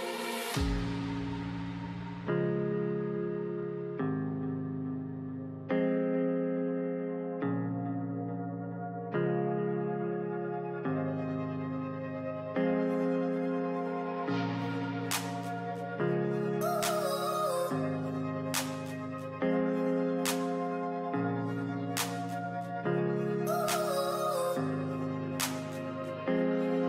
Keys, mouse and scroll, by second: 4.0 scroll down 2, 4.3 alt+scroll up 1, 4.5 alt+scroll down 1, 4.7 alt+scroll up 1, 4.9-5.5 alt+scroll down 1, 5.5 scroll down 2, 6.3-6.6 alt+scroll down 1, 6.6 alt+scroll up 1, 9.2 ctrl+i, 10.0 ctrl+i, 10.7 ctrl+i, 12.7 alt+scroll up 1, 13.5-14.5 alt+scroll up 1, 18.2 scroll down 1.